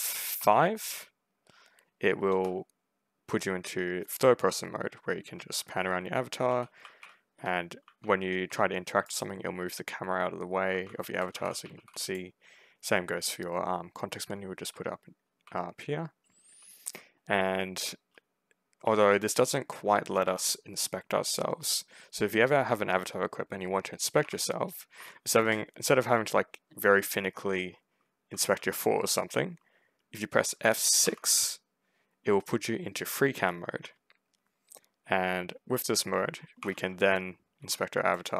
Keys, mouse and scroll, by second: 0.2 F5, 0.9 F5, 5.8-8.4 typing, 8.9 click, 10.3-12.1 typing, 11.9 middle click, 14.2 w, 15.1 s, 16.4 d, 20.1 2, 24.1 1, 24.8 F5, 27.9 w, 28.4 s, 30.9 F6, 36.5 2, 37.5 r.